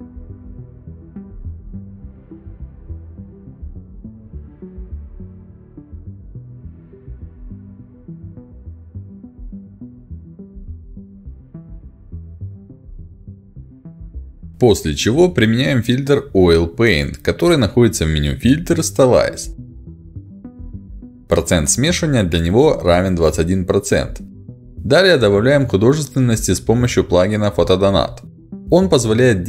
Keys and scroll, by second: 14.1 ctrl+j, 26.8 ctrl+s.